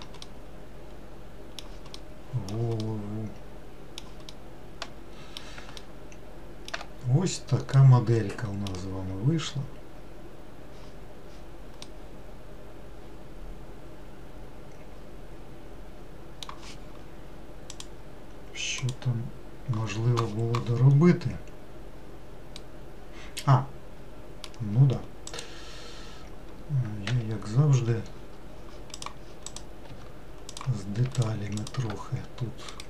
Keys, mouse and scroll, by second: 0.4-7.4 middle drag, 7.4-7.8 scroll down 1, 8.1-15.0 middle drag, 22.8-25.5 middle drag, 25.5 click, 29.7 click, 30.0 Tab, 30.7 click, 31.8 shift+click.